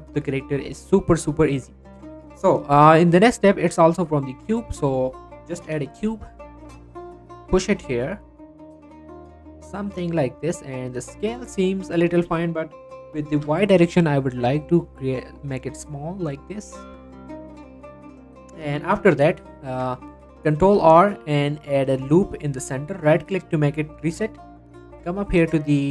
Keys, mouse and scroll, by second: 3.9 shift+a, 4.7 click, 6.3 scroll up 2, 6.4 g, 6.9 z, 10.3 click, 10.5 scroll down 1, 10.6 middle click, 11.1-11.9 scroll up 1, 12.3 middle click, 13.3-13.7 typing, 17.0 click, 17.2-19.7 middle drag, 19.7 Tab, 20.6 ctrl+r, 21.7 click, 23.1 right click, 24.9 click.